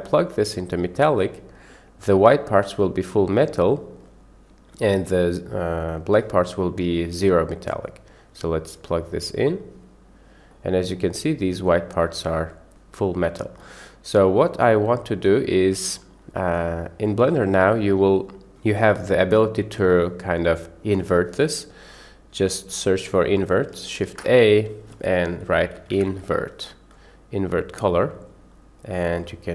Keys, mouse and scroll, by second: 0.3-4.0 drag, 7.6-9.7 drag, 10.5-11.0 middle drag, 11.7 middle click, 14.6 click, 15.0 click, 16.5 middle click, 17.1 click, 18.5-20.6 drag, 24.1 shift+a, 29.2-29.5 drag.